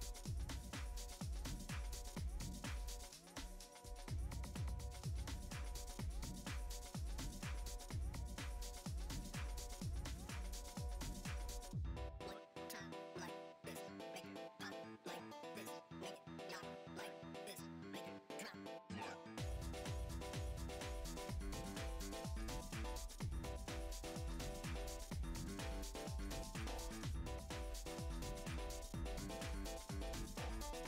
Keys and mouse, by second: 0.0 click, 1.0-1.3 drag, 1.3 middle click, 1.8 KP_7, 2.3-2.7 shift+middle drag, 2.7 g, 3.6-4.2 middle drag, 4.2 g, 5.1 s, 5.8 g, 7.3 KP_7, 7.5 Tab, 8.5 shift+right click, 9.6 KP_7, 10.3-11.1 drag, 12.1 shift+d, 12.1 a, 12.9 a, 14.2 a, 14.4 shift+d, 16.1 click, 16.5 click, 16.8-17.1 drag, 17.4 drag, 18.0 middle drag, 18.7-22.8 typing, 22.3 shift+middle click, 23.7 shift+middle click, 25.2 shift+right click, 25.5-30.4 typing, 27.2 click, 29.7 ctrl+Tab, 30.4 ctrl+z, 30.6 F6, 30.6 Tab.